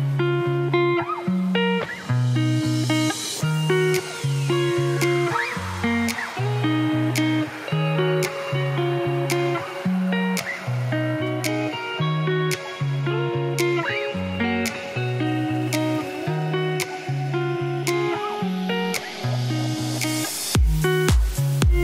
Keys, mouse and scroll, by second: 1.0-1.3 scroll up 1, 1.3 shift+right click, 1.5 shift+a, 2.9 Tab, 3.0 1, 4.6 f, 4.8 middle click, 4.9 e, 6.4 e, 7.7 e, 8.5 shift+middle click, 8.8-9.8 scroll up 2, 9.8 3, 9.9-11.1 alt+drag, 11.1 3, 11.2 click, 11.5 x, 12.3 2, 12.5-15.9 alt+drag, 18.0 alt+click, 18.3 ctrl+b, 20.0 alt+click, 20.9 middle click, 21.7 ctrl+z.